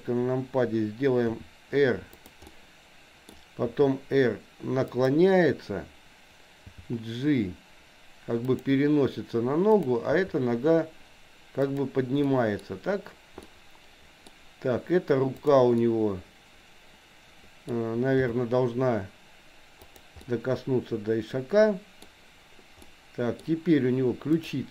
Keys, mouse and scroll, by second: 1.2 r, 2.6 middle click, 3.8 r, 6.7 g, 9.8 click, 10.1 g, 12.3 middle click, 13.4-14.4 middle drag, 15.4 click, 15.8-17.7 middle drag, 18.2 g, 20.2 scroll up 1, 20.3-22.1 middle drag, 22.1 scroll down 1, 22.9 middle click, 24.3 click.